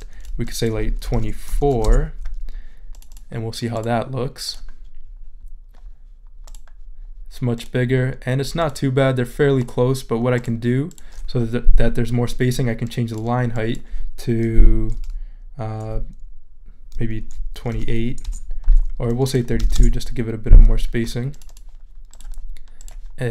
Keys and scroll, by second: 0.8-1.7 typing, 1.8 Return, 17.5-20.1 typing.